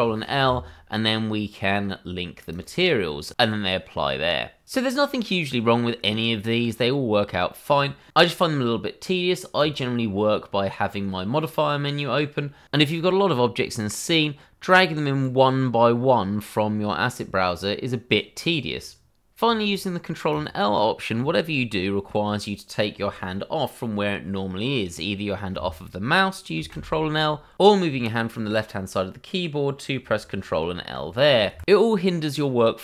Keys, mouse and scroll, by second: 2.5 click, 9.6 click, 12.6-13.0 scroll up 1, 14.7 click, 18.0 click, 20.3 click.